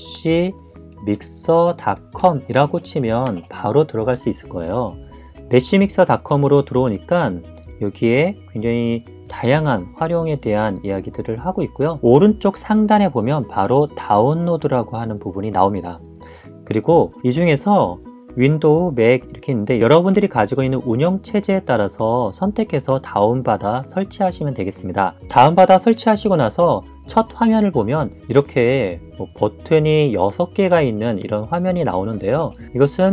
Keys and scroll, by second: 0.0-1.3 typing, 2.4-4.7 typing.